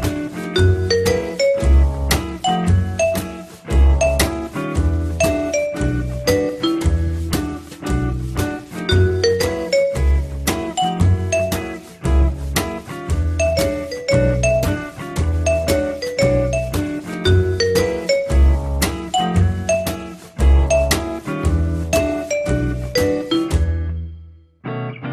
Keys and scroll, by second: 16.7 t, 24.9 F3.